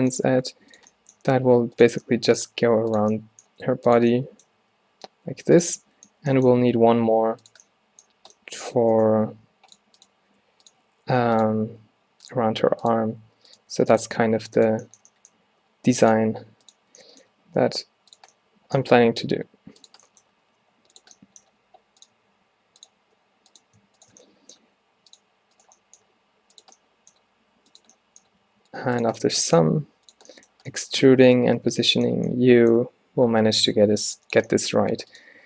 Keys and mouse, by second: 0.3 g, 1.3 e, 2.6 e, 3.6 e, 4.7 e, 6.9 shift+d, 8.7 g, 9.8 click, 10.4 g, 11.7-14.2 typing, 13.3-14.9 middle drag, 14.9-17.2 drag, 15.5 e, 16.3 e, 17.4 e, 18.9 e, 20.4 g, 21.6 g, 22.2 e, 23.1 g, 24.1-24.7 drag, 24.7 g, 26.1 e, 27.3 g, 28.4 e, 29.7 g, 31.7 f, 33.4 alt+w, 33.8 g, 34.9 g.